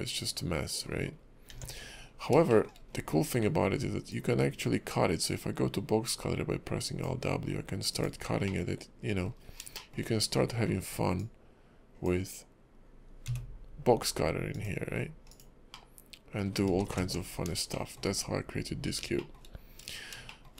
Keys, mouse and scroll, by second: 1.1 scroll up 2, 1.5 Tab, 1.8-2.5 scroll down 9, 2.5 shift+middle click, 2.8-3.4 scroll up 2, 3.4 alt+w, 4.1 click, 8.4 middle click, 9.4 scroll up 3, 9.7 shift+middle click, 10.7 scroll down 3, 11.2 click, 15.7 middle click, 16.8 ctrl+z, 16.9 ctrl+z, 17.7 shift+middle click, 19.2 shift+middle click, 19.4-19.8 shift+scroll down 2, 19.8-20.2 scroll up 2, 20.3 shift+middle click, 20.5 shift+scroll up 1.